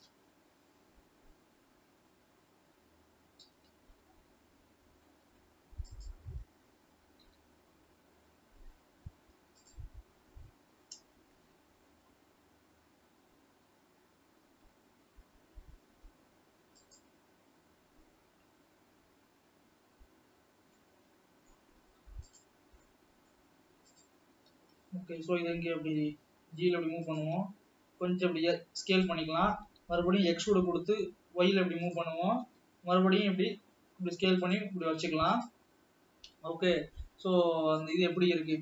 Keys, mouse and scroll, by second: 1.8 KP_7, 4.0 g, 8.0 ctrl+KP_1, 9.0-10.2 scroll up 3, 10.2 click, 11.5 s, 20.3-21.2 scroll down 2, 21.2-22.7 middle drag, 22.7 click, 23.3-24.5 middle drag, 24.5 click, 25.5 g, 28.3 s, 30.7 e, 33.1 s.